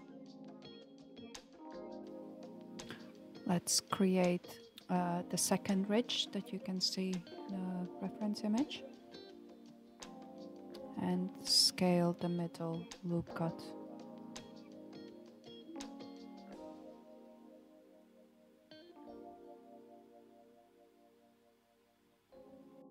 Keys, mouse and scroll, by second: 1.3 alt+z, 2.0 alt+click, 4.6 alt+z, 5.5 alt+z, 10.1 ctrl+b, 15.3 ctrl+r, 17.8 s.